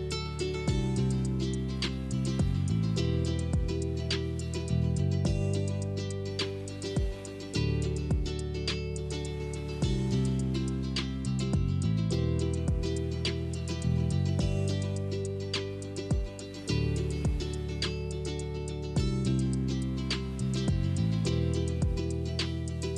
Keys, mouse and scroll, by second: 2.4 ctrl+v, 3.1 click, 5.8 click, 6.1-9.1 middle drag, 12.5 click, 13.2-14.3 middle drag, 14.3 click, 16.8-19.9 middle drag, 19.9 click.